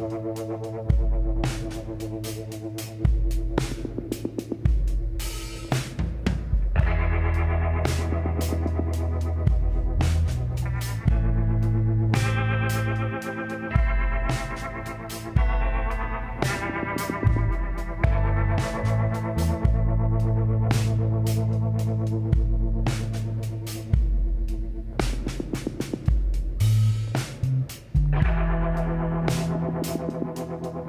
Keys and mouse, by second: 3.2-5.0 drag, 5.6 l, 6.3-8.1 drag, 8.1 middle click, 10.7-13.7 drag, 12.8 x, 20.1-22.5 drag, 22.7-24.8 middle drag, 25.8 k, 29.2-30.8 drag, 30.4 g.